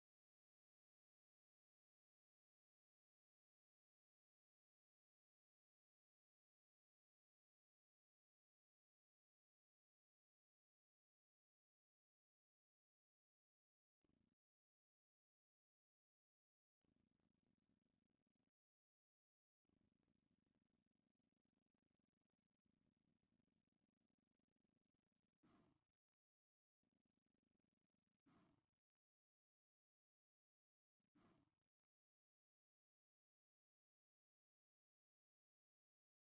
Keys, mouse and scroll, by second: 3.5 shift+v, 5.3 click, 6.7 Delete, 9.3 click, 11.9-13.9 drag, 14.2 shift+v, 15.0 click, 15.8 click, 21.9 middle click, 24.6 shift+click, 27.4-28.5 middle drag, 29.4 j, 30.3 a, 30.7 click, 31.7 j, 32.0 middle click, 32.8 a, 33.2 click, 34.1 j, 34.4 a, 34.9 click, 35.5 shift+click, 36.0 j.